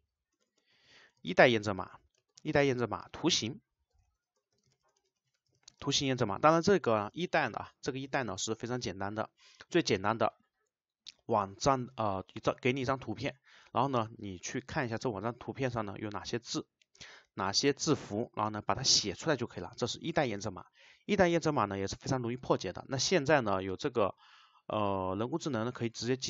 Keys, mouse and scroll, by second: 0.4 BackSpace, 2.3 shift+;, 5.8 space, 7.0 Return.